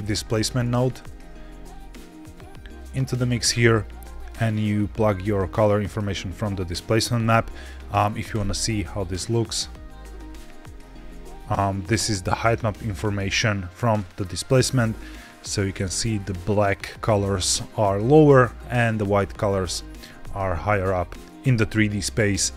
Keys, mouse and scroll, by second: 3.4-4.0 scroll up 2, 4.0 middle click, 4.9-7.6 drag, 9.3 ctrl+shift+click, 9.5 ctrl+shift+click, 10.2 ctrl+shift+click, 11.2 scroll down 3, 11.7-12.6 middle drag, 12.9 scroll up 3, 20.6-21.2 middle drag.